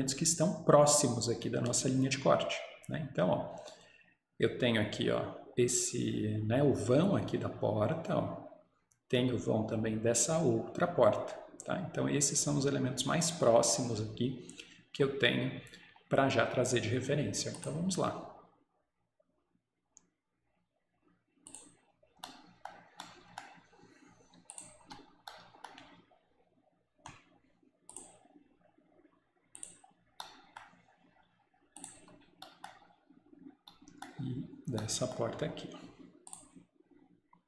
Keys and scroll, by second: 24.9 Escape, 32.0 Escape.